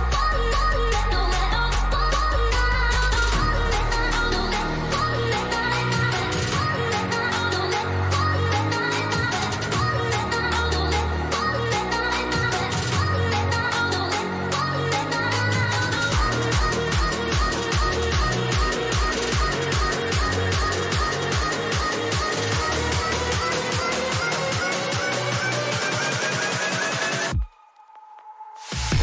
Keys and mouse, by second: 2.3 click, 2.5-4.5 drag, 4.5 ctrl+=, 5.2 ctrl+=, 7.1-12.0 drag, 12.9 click, 16.3 shift+click, 19.6-29.0 drag.